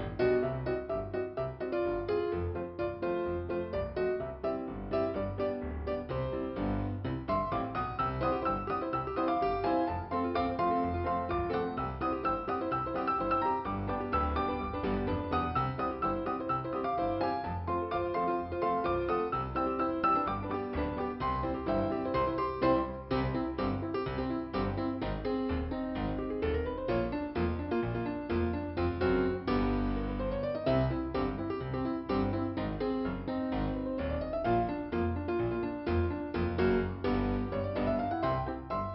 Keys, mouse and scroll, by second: 2.1 click, 2.2 click, 2.5 scroll down 2, 4.4 click, 7.2 click, 8.4 click, 9.0 scroll down 2, 11.2 scroll up 2, 13.7 click, 27.2 click, 28.3 right click, 29.0 scroll up 1, 30.1 scroll up 1, 30.4 scroll down 1, 31.6 click, 31.7 click, 34.7 f, 35.6-36.0 scroll down 1, 36.4 click, 38.4 click, 38.7 click.